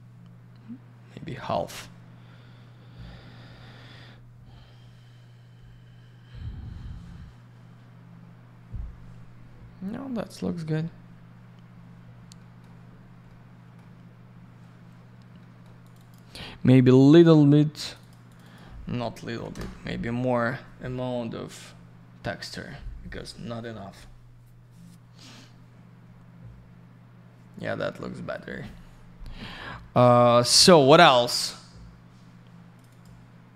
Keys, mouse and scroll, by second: 12.4 middle click, 12.9 scroll down 1, 13.3 middle click, 14.1-14.6 scroll down 1, 14.8 scroll up 1, 15.4 middle click, 15.8 click, 15.9 click, 16.0 click, 16.1 double click, 17.8 click, 17.9 click, 18.0 click, 18.1 double click, 18.3 click, 18.3 click, 18.4 click, 18.5 double click, 19.3 9, 19.5 Return, 26.5 scroll up 1, 27.5 scroll down 1, 32.7 click, 32.8 click, 32.9 click, 33.0 double click.